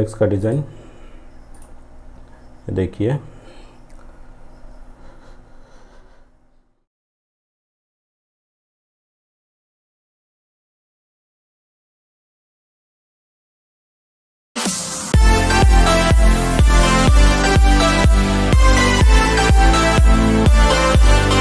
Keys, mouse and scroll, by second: 0.5 click.